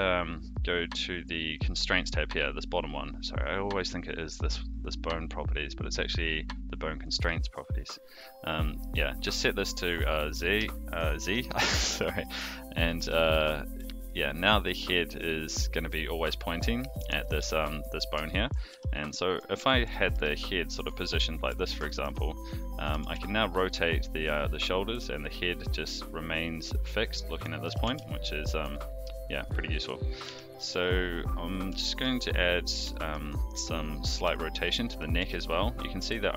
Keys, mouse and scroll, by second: 7.0 click, 9.5 click, 10.7-11.3 shift+middle drag, 12.0 shift+middle drag, 12.8 click, 12.9 g, 17.2-17.8 middle drag, 18.2 shift+middle drag, 18.7 g, 19.6 shift+middle drag, 20.1 g, 21.0-21.6 middle drag, 21.8 shift+middle drag, 22.7 click, 22.9 r, 27.6 alt+g, 27.8 alt+r, 28.5 click, 30.2 alt+g, 30.5 alt+r, 31.8 shift+middle drag, 32.9 shift+middle drag, 34.1 KP_3, 35.2 g.